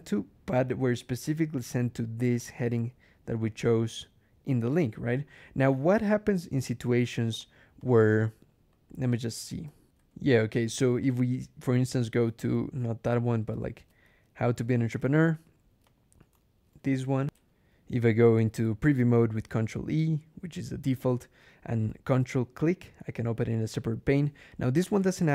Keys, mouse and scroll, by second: 1.1 click, 2.3 right click, 3.3 click, 5.0 click, 5.8 click, 6.7 ctrl+e, 7.3 ctrl+click, 7.7 ctrl+click, 8.6 BackSpace, 9.8 alt+\, 10.9 click, 11.8 ctrl+click, 12.1 ctrl+z, 12.9 ctrl+[, 13.3-14.4 typing, 14.8 Return, 15.7 click, 17.2 ctrl+alt+\, 18.6 ctrl+e, 22.4 ctrl+click, 23.6 click.